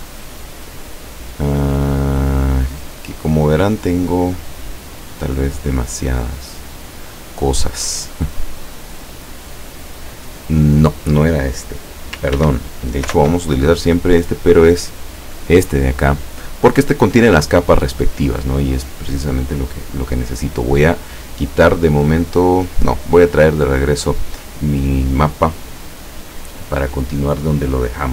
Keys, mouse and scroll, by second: 1.8-2.3 scroll down 1, 2.5 scroll up 1, 4.1 click, 6.3 click, 8.2 click, 12.5 ctrl+w, 13.1 ctrl+o, 15.1 click, 16.4 click, 20.7 click, 22.1 click, 22.9 click.